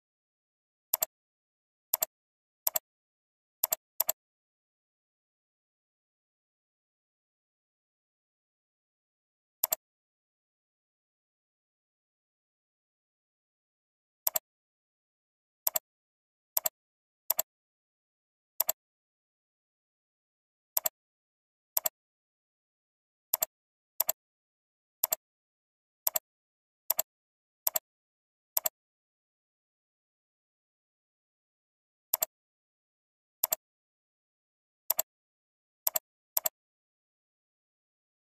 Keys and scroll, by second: 3.2 ctrl+c, 4.6 ctrl+v, 17.1 ctrl+c, 17.9 ctrl+v, 24.7 ctrl+c, 25.4 ctrl+v, 35.5 ctrl+c, 36.1 ctrl+c, 36.9 ctrl+v.